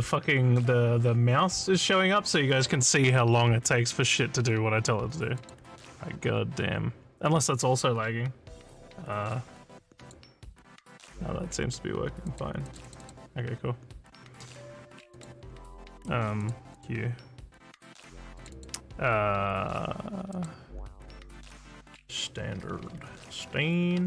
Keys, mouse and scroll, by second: 5.4 click, 6.7 scroll up 1, 10.0 click, 12.2 click, 12.6 click, 12.8 click, 13.0 click, 15.1 click, 16.4 click, 16.7 click, 18.4 click, 18.6 click, 20.3 click, 22.4-24.0 typing.